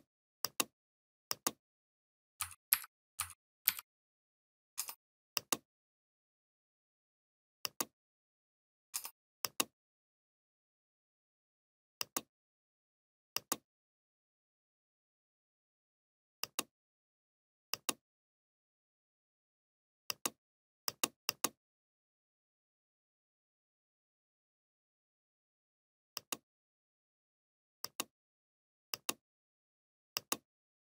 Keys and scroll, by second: 0.2 ctrl+v, 0.9 ctrl+v, 2.2 ctrl+z, 6.6 ctrl+f, 7.6 ctrl+[, 10.9 ctrl+f, 13.5 Right, 17.8 ctrl+c, 18.1 Left, 19.6 ctrl+[, 20.7 Left, 22.1 ctrl+g.